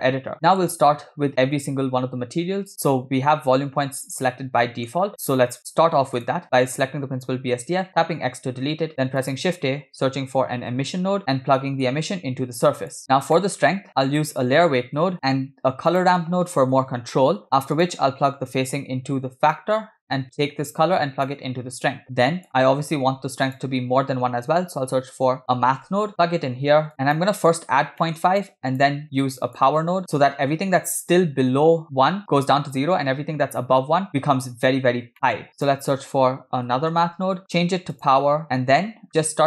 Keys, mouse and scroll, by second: 0.3-0.6 middle drag, 1.0-1.8 scroll up 5, 4.7 middle click, 5.0-6.2 scroll up 2, 6.4 click, 8.0 x, 9.0 shift+a, 11.9-13.0 drag, 13.0 scroll up 3, 13.4 middle click, 13.9 shift+a, 15.5 shift+a, 18.5-19.7 drag, 20.5-21.7 drag, 22.0-22.5 drag, 23.0 shift+a, 26.9 click, 27.7 scroll down 2, 28.1 middle drag, 28.4-28.9 drag, 29.3 click, 30.1 shift+a, 34.8 scroll up 2, 35.1 shift+middle click, 35.5 shift+a, 38.1 click, 39.1 scroll up 2.